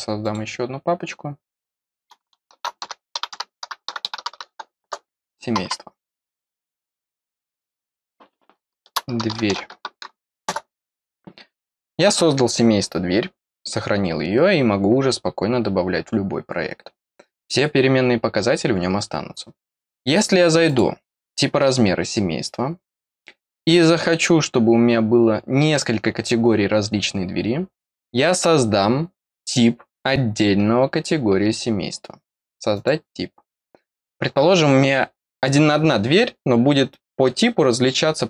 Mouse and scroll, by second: 0.2 click, 6.3 click, 7.6 click, 20.6 click, 32.7 click.